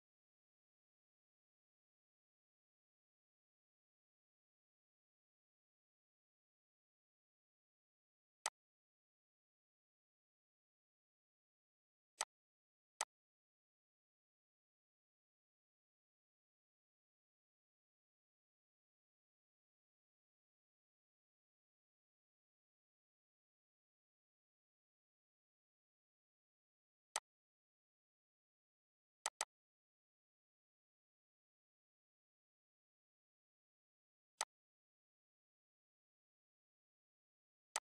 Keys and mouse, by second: 8.1 click, 11.8 click, 26.8 click, 34.1 click, 37.4 click.